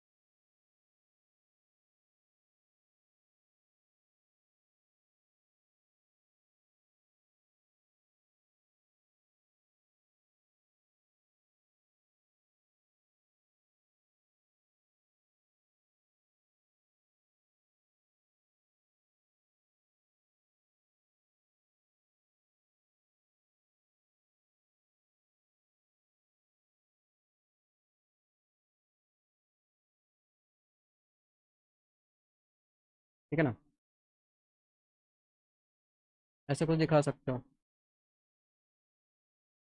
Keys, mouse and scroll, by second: 0.4 click, 1.8 click, 2.5 click, 4.0 click, 5.0 click, 5.7 ctrl+z, 6.0 alt+middle click, 6.9 click, 7.6-8.6 drag, 9.5 click, 10.5 click, 11.7 alt+middle click, 12.3 middle click, 12.6 alt+middle click, 13.7 alt+middle click, 14.5 click, 14.9 middle click, 15.4 alt+middle click, 16.3-17.5 drag, 18.5 click, 19.9 click, 21.0-22.2 drag, 24.7 click, 25.3-26.3 drag, 26.9 click, 27.6 click, 28.6 click, 28.9 click, 29.6 middle click, 30.0 alt+middle click, 30.5 middle click, 30.9 click, 31.3 middle click, 31.7 F3, 32.7 alt+middle click, 33.9 alt+middle click, 35.5 middle click, 36.2 alt+middle click, 37.2 alt+middle click, 38.2 middle click.